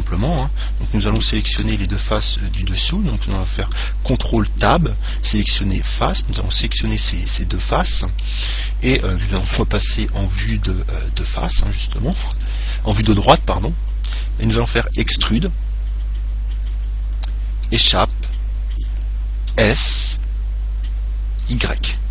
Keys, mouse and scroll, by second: 0.6-2.6 middle drag, 1.8 Tab, 4.4 ctrl+Tab, 6.0 right click, 7.6-9.5 middle drag, 7.7 right click, 9.7 KP_1, 10.6 KP_3, 11.7-16.2 middle drag, 15.2 e, 19.7 s.